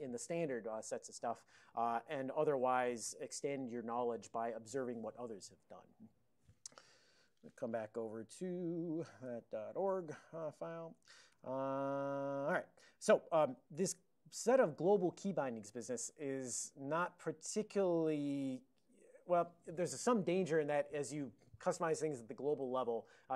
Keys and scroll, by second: 7.3 ctrl+x, 7.6 b, 8.9-9.8 typing, 9.8 Return, 10.7 ctrl+a, 11.4 alt+n.